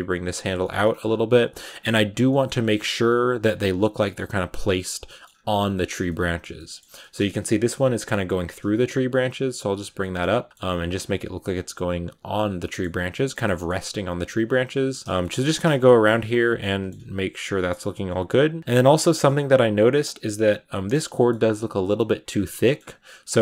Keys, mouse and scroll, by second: 0.5 shift+middle click, 0.9-1.4 scroll up 3, 1.4 r, 1.7 g, 2.1 shift+middle click, 2.4-3.2 scroll up 3, 2.5 middle click, 3.2 r, 3.5 g, 3.8 middle click, 4.2 g, 4.9 scroll down 1, 4.9 shift+middle click, 5.1-5.9 scroll up 3, 5.9-8.2 shift+middle drag, 8.2 right click, 8.9 shift+right click, 9.1 g, 9.9 middle click, 10.2 r, 10.5 middle click, 10.5 g, 11.3 r, 11.6 g, 12.3 right click, 12.5 middle click, 13.2 scroll down 3, 13.3 middle click, 13.8 r, 14.1 g, 14.4 r, 14.8 scroll down 2, 14.9 shift+middle click, 15.7 scroll up 2, 16.3 right click, 16.5 middle click, 16.8 scroll up 1, 16.8 g, 17.4 shift+middle click, 17.6 g, 18.2 g, 18.6 scroll up 6, 18.6 Tab, 18.8-19.4 scroll down 3, 19.0 shift+middle click, 19.4-22.2 middle drag, 22.2-23.4 scroll up 3, 22.4 middle click.